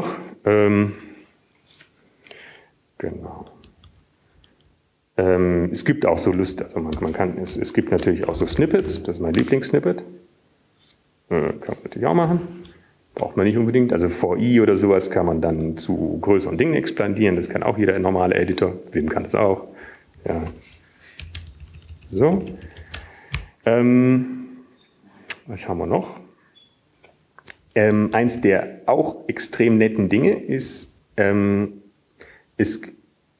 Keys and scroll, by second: 5.9 typing, 8.4 Up, 9.9 Down, 9.9 Return, 10.4-12.2 typing, 15.0-15.8 typing, 17.9 typing, 22.9 typing, 24.0-25.2 BackSpace, 30.2 Up, 31.4 Up, 32.4 Up.